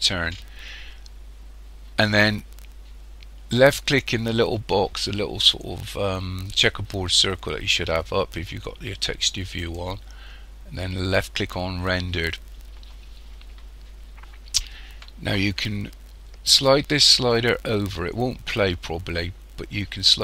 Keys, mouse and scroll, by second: 9.6 click, 11.6 click, 17.3 click.